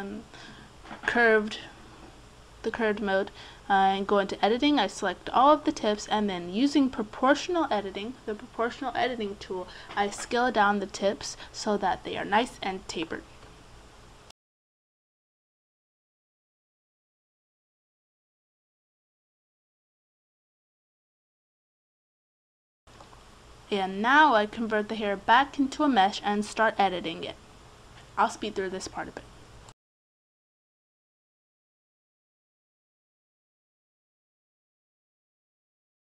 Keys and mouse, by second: 0.3 Tab, 2.4-6.0 right drag, 6.0 middle click, 6.1-7.5 right drag, 7.5 middle click, 9.0 alt+s, 13.1 click, 13.3-14.3 middle drag, 15.3 alt+s, 16.3 right click, 17.0 Tab, 19.6 Tab, 20.1 alt+s, 22.2 middle click, 23.8 Tab, 24.7 space, 27.6 Tab, 30.6 middle click, 31.3 right click, 32.7-34.4 right drag, 34.6 right click, 35.4 right click.